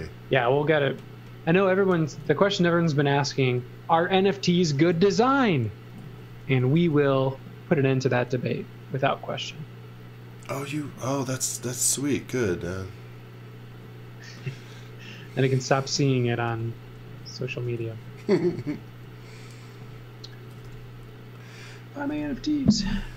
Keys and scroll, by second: 2.2 z, 4.4-7.2 typing, 15.8 z, 17.2 space, 17.8 z, 19.9-21.2 typing.